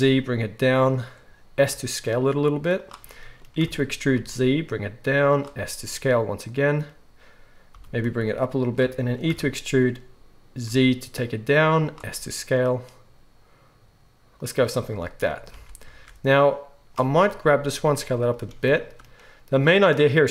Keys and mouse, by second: 1.6 s, 3.6 e, 5.6 s, 7.7 g, 9.2 e, 12.1 s, 15.5 alt+a, 16.4-18.3 drag, 17.4 s, 18.3-20.3 shift+middle drag.